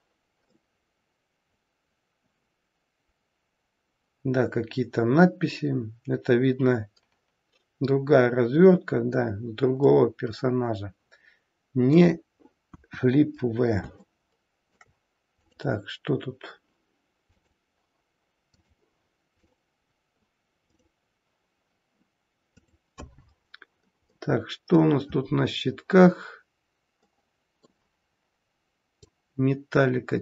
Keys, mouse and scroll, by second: 0.4 middle click, 9.8 middle click, 12.6 KP_1, 13.3-13.9 scroll down 1, 13.9 scroll down 3, 14.1 shift+middle click, 15.3 click, 17.3 click, 19.3 click, 20.7 click.